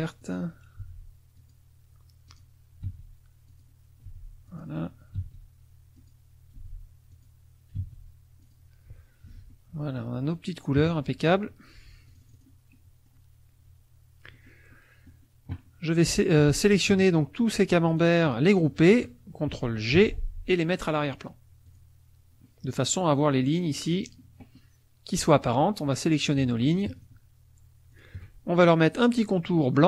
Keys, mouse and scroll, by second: 0.2 click, 0.8 n, 1.3 click, 2.3 click, 2.8 d, 3.5 click, 4.1 n, 4.4 click, 5.1 d, 6.0 click, 6.5 n, 7.1 click, 7.7 d, 8.4 click, 9.2 F1, 9.5 middle click, 10.8 KP_Subtract, 12.1 click, 12.7 middle click, 14.3 middle click, 16.0 click, 17.0 shift+click, 17.5 shift+click, 17.9 shift+click, 18.2 shift+click, 20.0 ctrl+g, 21.7 click, 22.4-25.2 middle drag, 25.2 click, 26.3 shift+click, 26.9 shift+click, 27.9 shift+click.